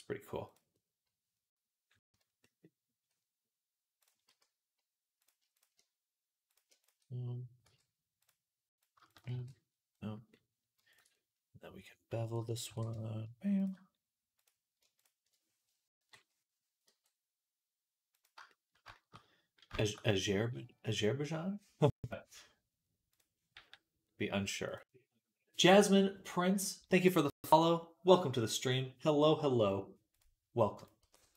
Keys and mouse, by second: 0.3 click, 0.3 middle click, 2.0 z, 4.1 z, 4.2 click, 4.2 middle click, 4.2-10.5 right drag, 5.4 click, 5.4 middle click, 6.3 click, 6.3 middle click, 7.5 m, 8.6 click, 8.6 middle click, 8.9 click, 8.9 middle click, 9.2 shift+r, 10.7 ctrl+click, 12.5 ctrl+b, 14.2 click, 14.7-31.3 alt+shift+right drag, 15.9 KP_3, 16.7 g, 23.0 click, 23.0 middle click, 23.4 g, 30.0 click, 30.0 middle click, 30.6 click, 30.6 middle click, 30.9 g.